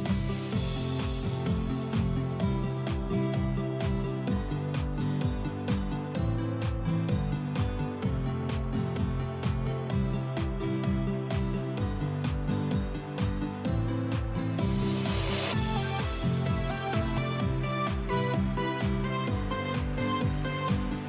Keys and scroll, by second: 9.8 ctrl+d, 10.1 ctrl+d, 10.4 ctrl+d, 10.6 ctrl+d, 10.8 ctrl+d, 11.1 ctrl+d, 11.3 ctrl+d, 11.5 ctrl+d, 11.9 ctrl+d, 17.6 ctrl+g.